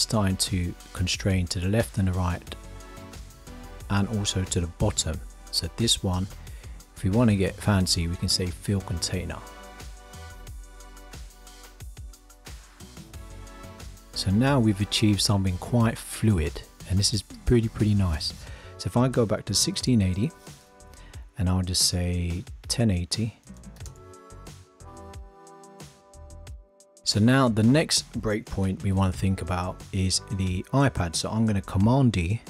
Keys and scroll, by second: 31.8 super+d.